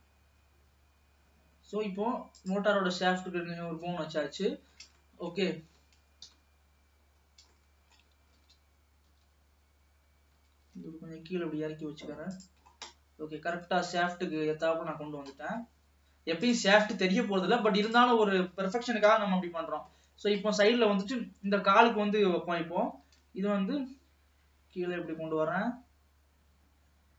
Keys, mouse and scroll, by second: 2.8 scroll down 1, 3.1-5.9 middle drag, 5.9 ctrl+s, 6.5 KP_1, 7.3-7.7 scroll up 1, 7.7 shift+middle click, 8.6 alt+a, 9.2 l, 10.5 g, 12.8 scroll down 3, 13.0-14.1 middle drag, 14.1 ctrl+s, 14.3-14.6 scroll up 2, 14.6 alt+a, 15.2 scroll down 2, 15.5-16.5 middle drag, 16.5 click, 17.3-17.9 scroll up 2, 17.9 click, 19.2 KP_3, 20.0-20.7 scroll down 6, 20.7 shift+middle click, 21.1 scroll up 3, 22.3-23.0 scroll up 2, 23.0 e.